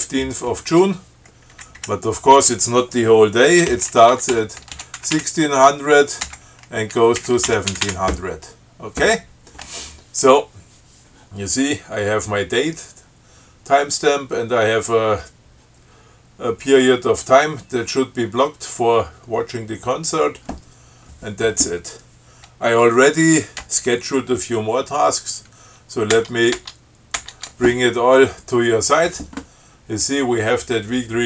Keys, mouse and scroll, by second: 1.7 Down, 2.0 Right, 3.9-8.4 typing, 26.4 shift+Tab.